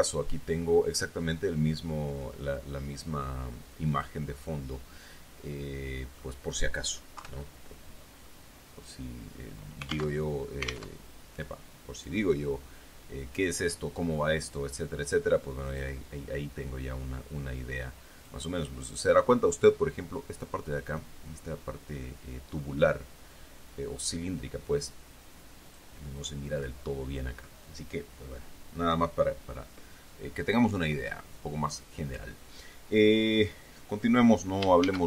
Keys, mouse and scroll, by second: 4.3 click, 5.9 middle click, 7.5 KP_3, 8.6 scroll up 2, 10.5 alt+Tab, 11.4 alt+Tab, 12.3 click, 16.1 click, 18.6 click, 26.0 click.